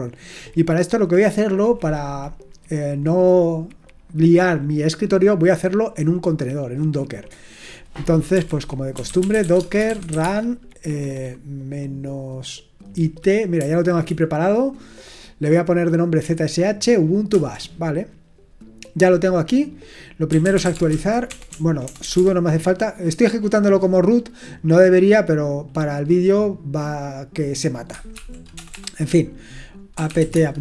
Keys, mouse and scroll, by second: 8.3-10.6 typing, 13.6 Right, 20.0-22.0 typing, 27.9-28.5 typing, 29.7-30.6 typing.